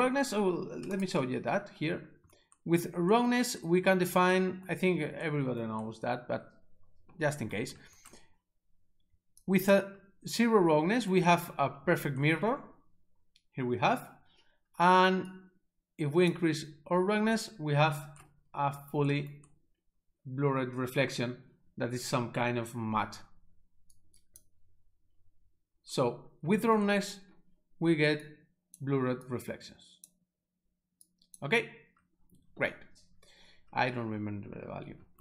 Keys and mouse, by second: 1.0 right click, 9.3 s, 9.5 click, 15.4 click, 24.0 click, 28.3 click, 29.3 click, 31.1 click.